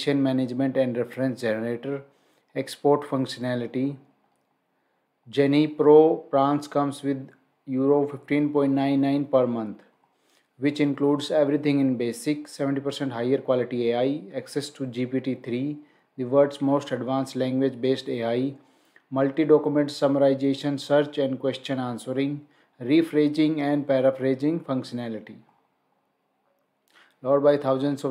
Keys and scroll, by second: 4.2 scroll up 1, 5.7 scroll down 1, 9.8 scroll down 1, 25.3 scroll down 1.